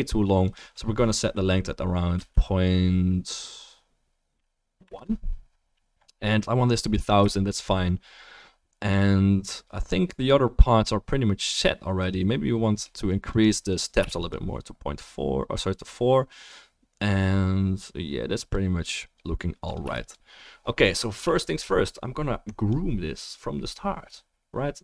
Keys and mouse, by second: 13.4 click, 14.3-18.4 drag, 20.1-21.4 drag.